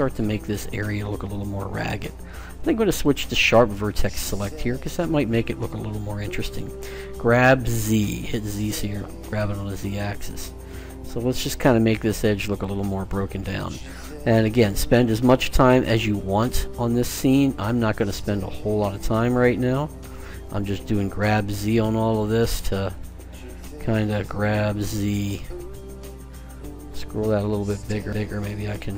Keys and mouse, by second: 1.8-3.6 drag, 5.0-6.5 right drag, 6.7 g, 13.9-15.3 drag, 15.3 right click, 15.6 g, 17.5 click, 18.2 middle click, 19.1 right click, 19.4 g, 23.3-24.8 right drag.